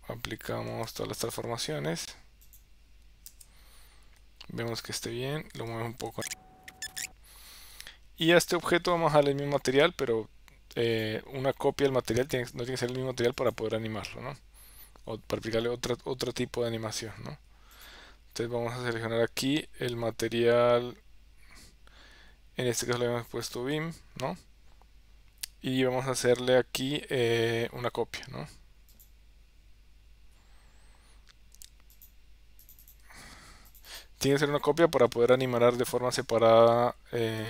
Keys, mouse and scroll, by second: 1.0 ctrl+a, 3.5 KP_0, 6.2 g, 6.6 space, 6.8 g, 7.0 ctrl+a.